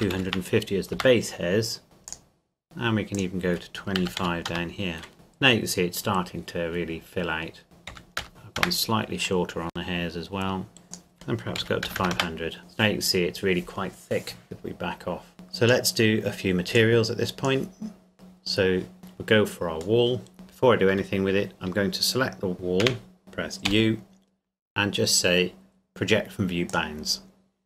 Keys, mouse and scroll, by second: 0.0 KP_2, 0.1 KP_5, 0.2 KP_0, 1.0 KP_Enter, 2.3 click, 2.6-3.2 scroll down 1, 3.2 click, 4.0 KP_2, 4.2 KP_5, 4.5 KP_Enter, 6.8-7.6 scroll up 1, 7.6 click, 7.9 KP_Decimal, 8.2 KP_0, 8.3 KP_5, 8.6 KP_Enter, 10.8-11.6 scroll up 1, 11.6 KP_5, 11.8 KP_0, 12.1 KP_Enter, 14.4 scroll down 1, 15.3 click, 20.0 middle click, 20.3 scroll down 1, 20.9 Tab, 22.5 click, 22.8 c, 23.2 shift+right click, 23.7 u, 26.7 click.